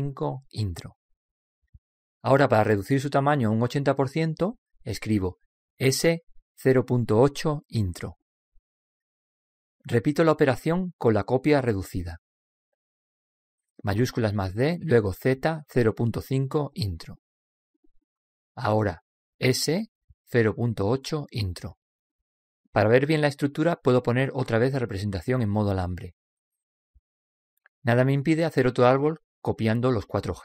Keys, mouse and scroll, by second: 6.0 s, 14.8 shift+d, 19.9 s, 26.2-28.0 drag, 29.8-30.4 middle drag.